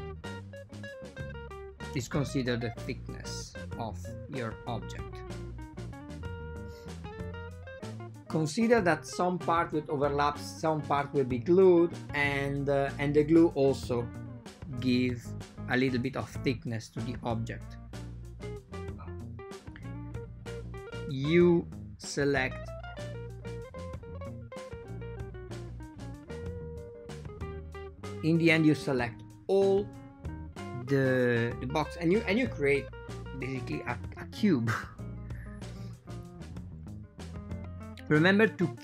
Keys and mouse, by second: 0.6 r, 5.7 r, 11.9 right click, 12.3 click, 12.7 right click, 13.5 g, 17.0 a, 17.7 alt+shift+click, 19.8 alt+shift+click, 20.7 r, 24.4 r, 26.0 a, 26.1 a, 26.5 alt+shift+click, 27.3 r, 30.1 ctrl+middle click, 30.2 a, 30.5 ctrl+shift+middle click, 32.3 alt+shift+click, 33.8 r, 38.1 click.